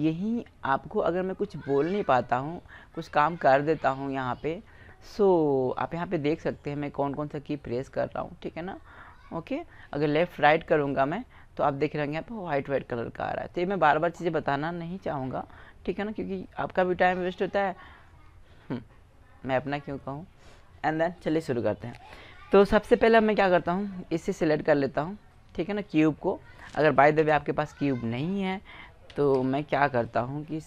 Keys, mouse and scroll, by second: 0.1 s, 2.9-5.1 middle drag, 10.0 right click, 10.9-12.0 middle drag, 12.0 right click, 12.2 click, 12.4-12.7 middle drag, 15.2 KP_1, 23.6-25.4 right drag, 25.5 right click, 27.2 Delete, 29.1 KP_1, 29.3 KP_5.